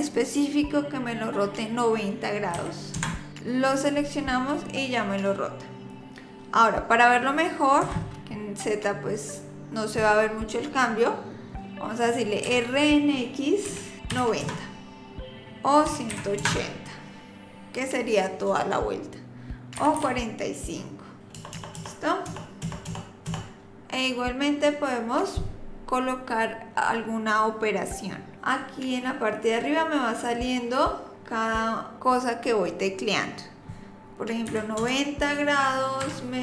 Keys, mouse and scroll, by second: 12.5 r.